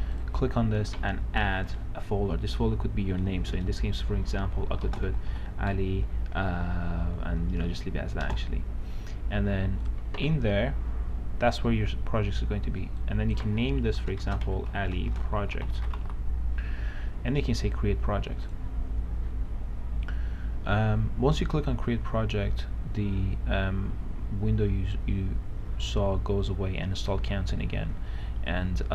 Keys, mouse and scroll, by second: 4.9-6.0 typing, 8.4 Return, 10.0 click, 14.3-17.2 typing, 18.6 click.